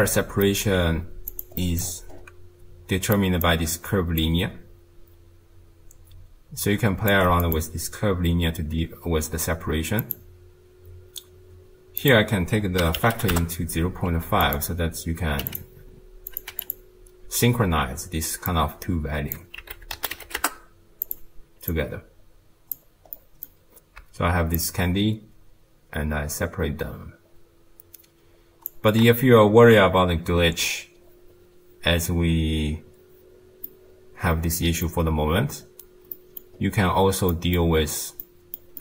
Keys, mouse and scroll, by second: 0.0 middle click, 0.7 g, 1.6 middle click, 1.8-3.2 scroll up 5, 3.2 click, 4.2-7.3 shift+drag, 7.4-10.5 drag, 12.0-15.8 drag, 16.3 click, 18.5 click, 21.7 click, 23.2-24.6 middle drag, 24.6-28.1 shift+drag, 33.7-36.6 middle drag, 36.6-37.3 scroll down 5, 37.3 middle click, 37.9-38.2 scroll down 3, 38.2-38.8 middle drag.